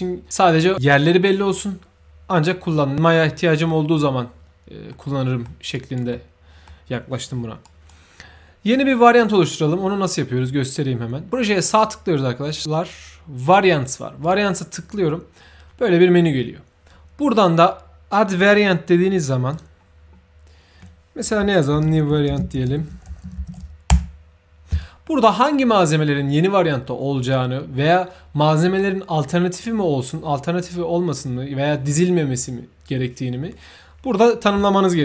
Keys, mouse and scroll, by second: 4.8 middle click, 5.7 right click, 6.0 middle click, 7.6 right click, 11.5 right click, 14.2 click, 19.4 click, 21.4-24.0 typing.